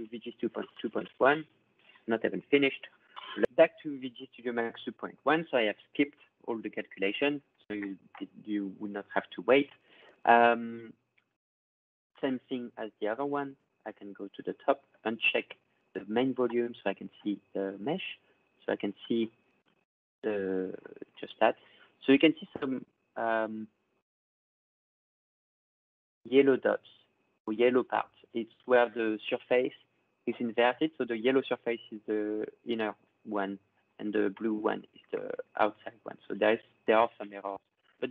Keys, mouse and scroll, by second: 0.1-1.6 drag, 2.1 click, 2.3 click, 11.2 click, 13.2 click, 15.1 click, 21.1-21.5 scroll down 2, 21.5 ctrl+scroll, 21.6-21.9 ctrl+scroll down 5, 21.9-22.3 ctrl+scroll, 22.9 ctrl+scroll, 24.7-26.1 drag, 28.3 ctrl+scroll, 34.6-35.2 ctrl+scroll, 36.3-36.8 ctrl+scroll, 37.4 ctrl+scroll.